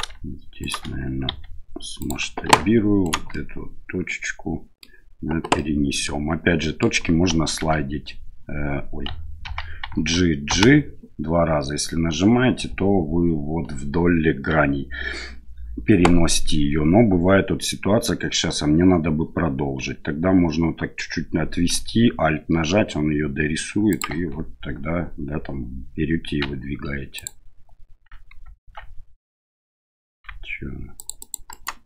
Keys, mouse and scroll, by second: 0.6 shift+right click, 2.5 1, 3.0 right click, 3.3-4.8 middle drag, 5.5 middle click, 6.6 middle click, 7.6 h, 9.4 alt+h, 9.9 g.